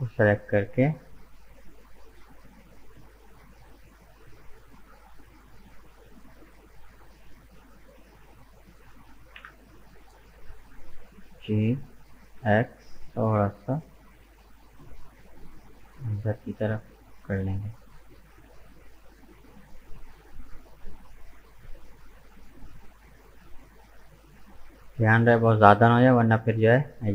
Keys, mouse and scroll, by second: 0.1 shift+right click, 0.6 shift+right click, 0.9 shift+right click, 1.5 shift+right click, 1.9 shift+right click, 2.4 shift+right click, 4.4 shift+right click, 5.1 shift+right click, 5.5 shift+right click, 5.9 shift+right click, 6.3 shift+right click, 7.0 shift+right click, 7.4 shift+right click, 8.0 shift+right click, 8.5 shift+right click, 9.4 KP_1, 10.9 g, 17.6-20.6 middle drag, 21.3 right click, 22.4 shift+right click, 23.1 shift+right click, 23.6 shift+right click, 24.2-27.1 middle drag.